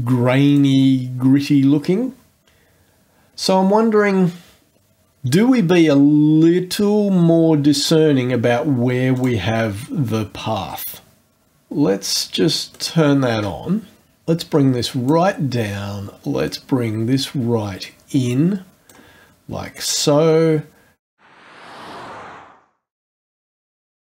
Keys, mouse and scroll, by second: 0.5 click, 7.7-8.1 scroll down 1, 9.1 click, 12.7 click, 14.2 click, 16.4-19.1 drag, 21.1 ctrl+click, 21.2 click, 21.9 ctrl+click, 22.0 ctrl+click, 22.4 ctrl+click, 22.4 ctrl+click, 22.7 ctrl+click, 22.9 ctrl+click, 23.2 click, 23.4 click, 23.8 click.